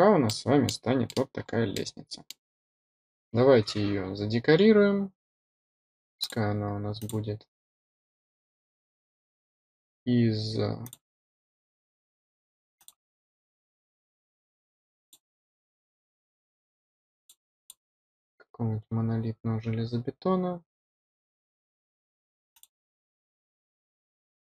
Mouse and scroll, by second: 0.2-0.6 middle drag, 1.0 middle click, 1.3 scroll up 2, 1.7-2.2 middle drag, 2.4 scroll up 2, 3.5-4.0 scroll up 4, 6.1 click, 6.9 click, 10.8 click, 12.7 click, 14.9 click, 15.9 scroll down 1, 16.5 scroll up 1, 17.1 click, 17.5 click, 22.5 click, 23.5-24.4 scroll down 6.